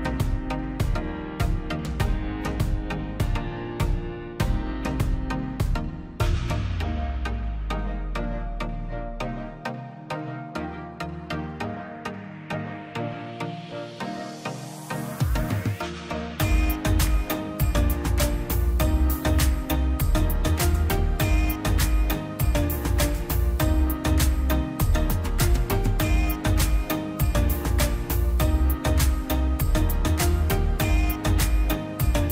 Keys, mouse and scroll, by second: 1.4 Escape, 1.9 click, 5.6 click, 6.6-7.4 scroll up 1, 7.4 click, 7.7 scroll down 1, 7.9 middle click, 8.5 scroll up 1, 8.7 middle click, 9.8 click, 10.3 middle click, 11.1 ctrl+z, 12.4 click, 12.5 scroll up 1, 13.0 click, 13.8-14.2 scroll up 1, 15.4-16.9 drag, 17.8 middle click, 18.2-18.8 scroll down 1, 19.3 click, 19.8-20.2 scroll up 1, 20.2 alt+click, 20.4-21.1 alt+scroll down 1, 23.1 ctrl+click, 23.3 scroll up 1, 23.9 click, 24.7 scroll down 1, 24.9 middle click, 25.2 scroll up 1, 25.9 click, 26.6 scroll down 1, 27.5 click, 27.8 scroll down 1, 27.9 click, 28.5 Delete, 28.7-29.0 scroll, 29.2 click, 30.6-31.0 scroll up 1, 31.0 click.